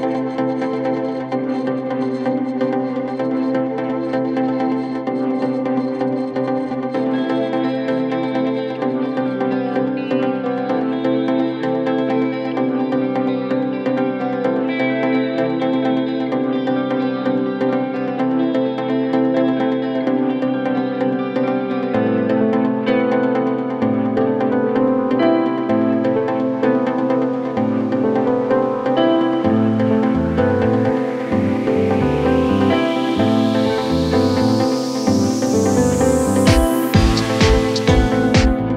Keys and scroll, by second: 8.9 ctrl+q.